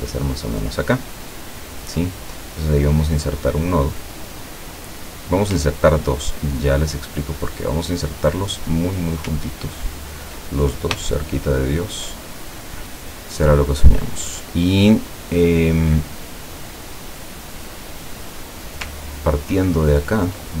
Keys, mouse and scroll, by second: 1.4 click, 6.2-6.8 ctrl+scroll up 2, 7.9 click, 9.4-10.1 ctrl+scroll down 4, 11.1-12.1 shift+drag, 12.1 shift+middle click, 13.2 click, 13.7 scroll down 2, 14.8-15.4 scroll down 2, 16.5 scroll up 2, 17.4 scroll up 2, 18.1-18.6 scroll down 2, 19.2-20.0 ctrl+scroll down 6.